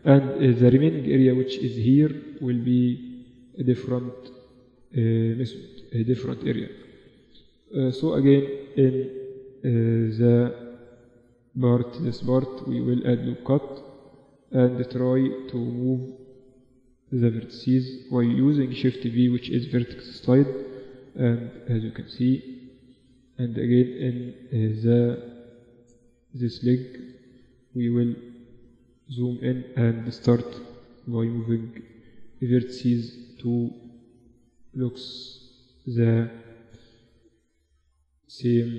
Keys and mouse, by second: 2.3-6.6 middle drag, 6.6-8.4 right drag, 8.4-11.4 middle drag, 11.4 ctrl+r, 14.8-17.9 drag, 15.4-18.0 right drag, 18.0 shift+v, 19.2 middle click, 20.2 shift+v, 21.0 middle click, 21.1 Tab, 21.7 Tab, 25.2 ctrl+r, 25.4-28.2 middle drag, 27.1 shift+b, 29.0 middle click, 29.2-31.1 drag, 30.1 shift+v, 31.7 shift+v, 33.6 shift+v, 34.6 Tab, 35.0 Tab, 38.1-38.7 middle drag.